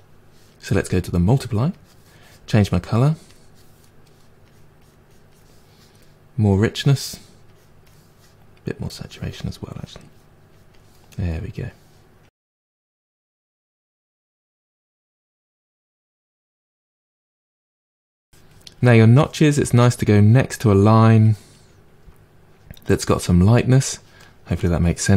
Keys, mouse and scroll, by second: 0.7-3.5 drag, 3.8 middle click, 4.4-6.6 drag, 7.4-9.0 drag, 9.7-11.1 drag, 11.1 middle click, 11.7-13.3 drag, 13.3-14.5 middle drag, 14.5 click, 14.9 middle click, 15.5 click, 16.3-17.3 middle drag, 17.3-24.2 drag, 24.2-25.1 middle drag.